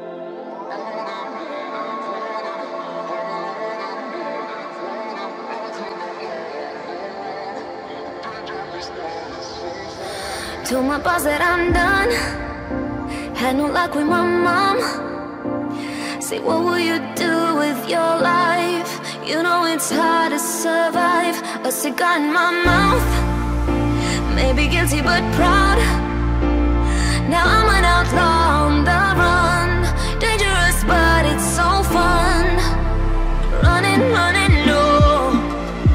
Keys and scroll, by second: 27.3 ctrl+z, 32.9 ctrl+z.